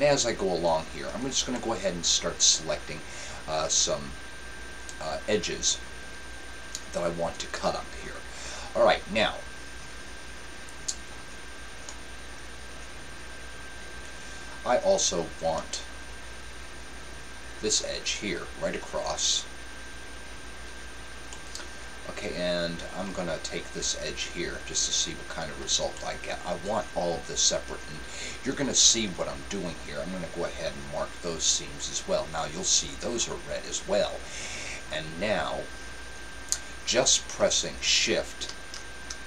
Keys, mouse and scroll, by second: 0.5-2.2 right drag, 1.5-3.2 middle drag, 11.9-13.6 middle drag, 15.6-17.4 middle drag, 19.9-21.6 right drag, 21.4-23.2 middle drag, 24.7-26.5 right drag, 26.2-27.8 middle drag, 31.1-32.8 drag, 33.2-34.9 middle drag.